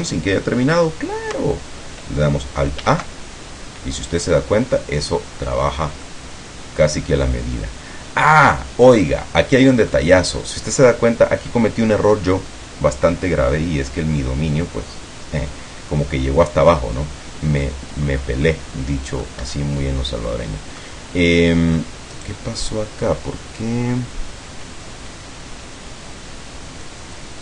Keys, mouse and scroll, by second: 2.9 alt+a, 4.3-4.7 scroll down 2, 5.9 scroll down 2, 6.1-9.3 middle drag, 9.5 middle click, 18.1-18.5 scroll up 2, 18.5-19.5 middle drag, 19.5 Escape, 20.9-22.0 middle drag, 22.2 right click, 27.1 click.